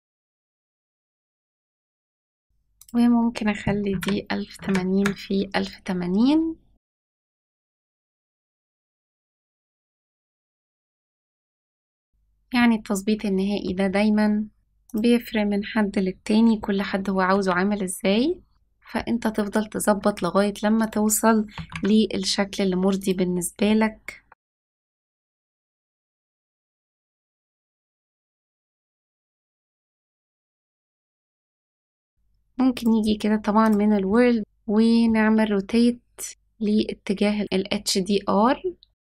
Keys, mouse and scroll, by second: 0.0-0.8 typing, 1.4 click, 1.9 click, 2.2 click, 2.7-5.7 drag, 6.7 scroll down 2, 7.2 n, 7.5 click, 7.6 scroll up 2, 9.0 shift+middle click, 9.6 middle click, 9.9-10.3 shift+middle drag, 10.8 middle click, 11.3-11.8 shift+middle drag, 12.0 scroll up 1, 12.5-13.6 shift+middle drag, 13.8 s, 14.7 click, 17.2 s, 19.8 s, 21.4 g, 24.1-27.4 typing, 28.6 click, 28.7 s, 30.3 g.